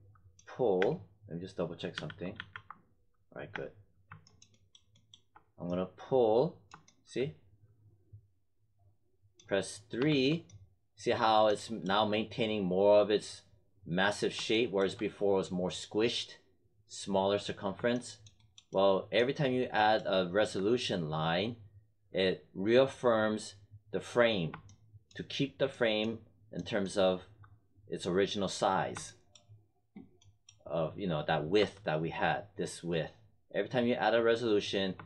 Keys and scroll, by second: 0.7 space, 1.9 z, 3.4 space, 9.9 3, 31.5 1.